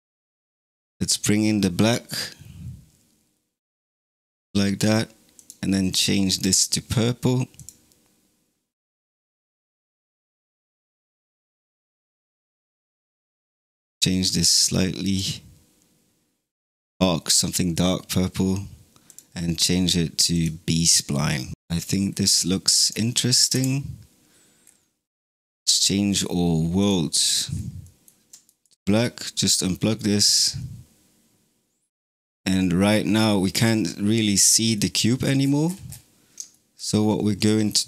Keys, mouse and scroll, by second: 0.9-3.9 drag, 5.2-5.8 drag, 11.7 click, 18.9-21.5 drag, 22.0-22.7 scroll down 2, 22.7 click, 23.4 KP_0, 24.5-25.9 scroll down 3, 25.9-27.1 drag, 27.1-27.6 scroll down 7, 27.8 middle click, 28.3 ctrl+right click, 34.6-35.3 middle drag, 35.3-35.8 scroll down 16, 36.4-37.8 shift+middle drag.